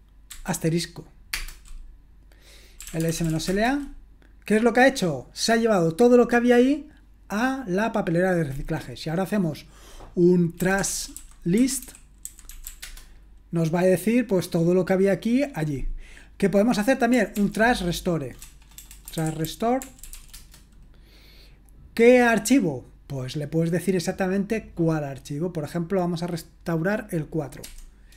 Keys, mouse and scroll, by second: 0.0-0.3 typing, 1.4 typing, 2.6-3.8 typing, 10.3-13.2 typing, 17.4 ctrl+p, 18.4-20.6 typing, 27.6-28.1 typing.